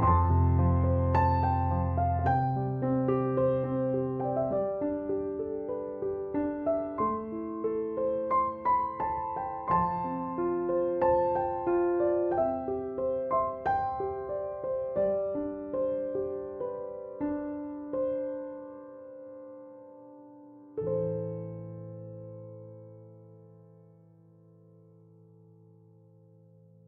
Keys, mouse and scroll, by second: 4.7 Escape, 11.0 Escape, 17.2 Escape, 22.3 3, 22.3 0, 22.5 Return, 26.8 2.